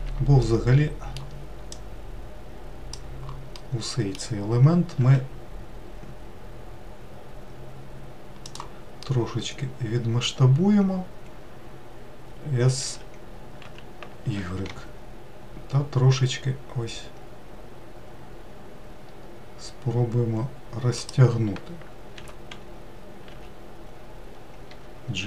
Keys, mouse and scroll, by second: 1.1-2.3 middle drag, 2.3 click, 4.2-5.6 middle drag, 5.6 s, 9.6-12.8 middle drag, 13.5 s, 22.8 g.